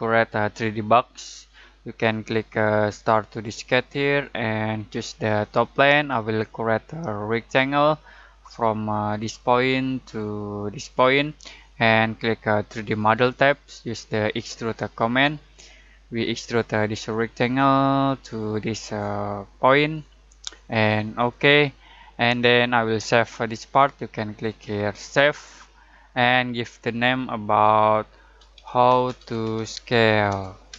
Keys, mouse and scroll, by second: 3.4 click, 16.2-18.0 middle drag, 18.0-19.9 drag, 19.9 middle click, 21.1 click, 24.9 click, 28.1-30.7 typing.